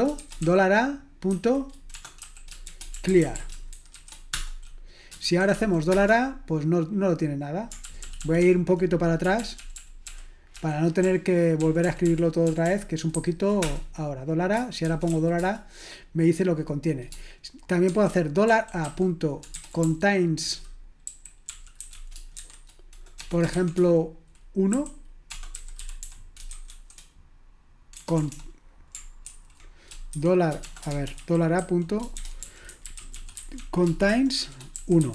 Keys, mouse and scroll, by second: 2.7-5.9 typing, 8.0 ctrl+`, 8.4 ctrl+`, 9.4 ctrl+p, 9.6 ctrl+p, 9.8 ctrl+p, 10.1 ctrl+p, 12.4 ctrl+p, 13.1 ctrl+n, 13.6 Return, 14.8-15.1 typing, 15.4 Return, 19.6-23.5 typing, 24.7-26.7 typing, 28.0 BackSpace, 28.2 BackSpace, 28.3 BackSpace, 29.2 ctrl+w, 30.2-35.1 typing.